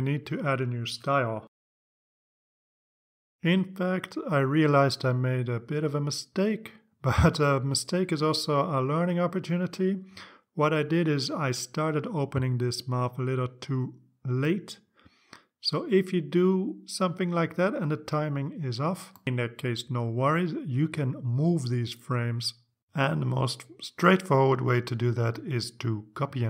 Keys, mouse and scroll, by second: 0.2 click, 0.5 right click, 2.3 click, 4.2 click, 5.2 click, 19.8 click, 21.4-23.1 drag, 24.6 click, 25.6 click, 26.1 right click.